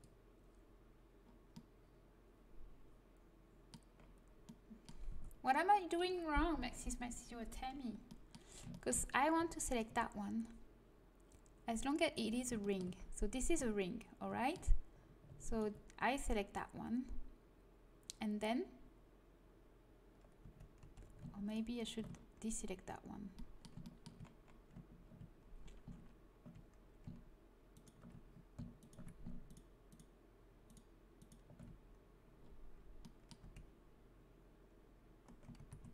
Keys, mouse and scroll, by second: 1.4-2.4 middle drag, 5.1 a, 8.3-9.6 middle drag, 9.6-11.5 right drag, 12.3-13.7 middle drag, 15.4-17.3 right drag, 20.4 a, 20.8 a, 21.4-23.4 right drag, 23.3 click, 23.7 middle click, 24.3-25.6 middle drag, 27.7-31.0 right drag, 32.3 middle click, 33.2 middle click, 33.4 a, 35.5 ctrl+z.